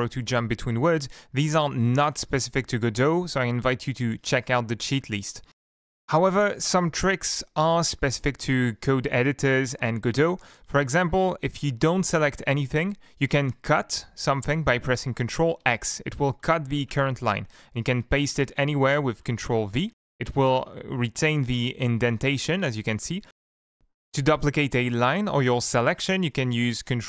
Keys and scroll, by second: 7.0 Up, 15.6 ctrl+x, 17.5 Up, 19.1 ctrl+v, 20.1 ctrl+z, 20.6 ctrl+z, 23.2 Down.